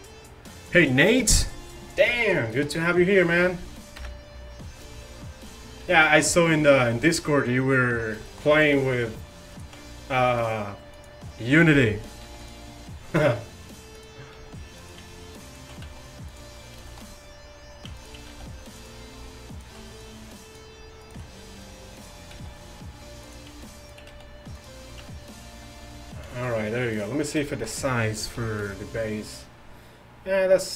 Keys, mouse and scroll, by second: 4.0 KP_1, 9.6-12.3 right drag, 10.2 s, 12.3 ctrl+r, 14.4 s, 15.7-18.4 drag, 15.9 s, 18.4 s, 19.0-23.9 drag, 22.4 s, 23.9-25.8 right drag, 24.2 s, 25.1 Tab, 27.0-27.4 middle drag, 28.4 g, 28.6-29.2 drag.